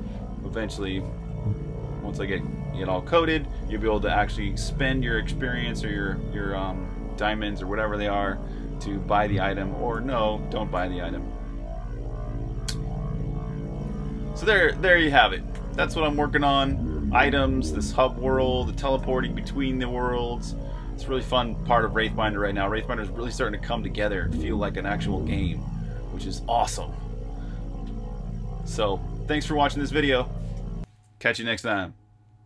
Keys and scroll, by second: 0.7-1.2 typing, 9.8-11.8 typing, 13.4-15.9 typing, 17.4-20.9 typing, 22.0 typing, 23.1-25.0 typing, 30.9 super+q.